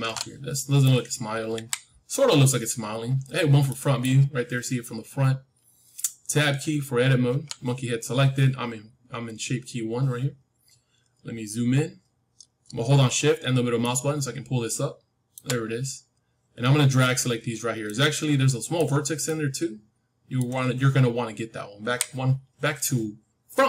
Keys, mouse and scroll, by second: 0.0 alt+middle click, 0.5-2.7 middle drag, 1.5 KP_1, 2.7-3.1 scroll up 1, 3.1-3.9 scroll down 1, 3.9-7.2 middle drag, 7.2 Tab, 11.2-12.4 scroll up 1, 12.4-15.9 middle drag, 15.9-17.8 scroll up 1, 17.8-21.7 middle drag, 21.7 KP_1.